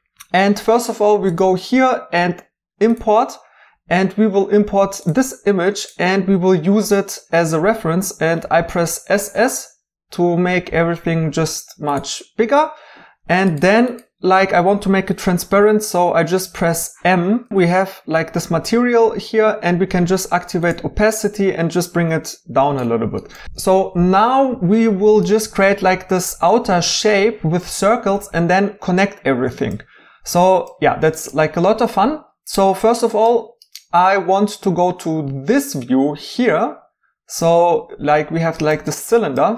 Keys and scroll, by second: 8.4 s, 8.6 s, 17.5 m.